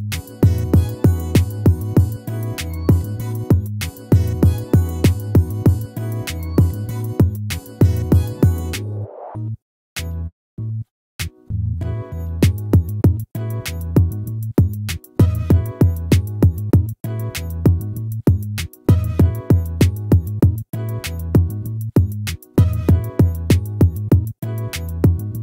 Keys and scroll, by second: 2.9 ctrl+-, 6.3 ctrl+-, 8.1 ctrl++, 20.6 ctrl++.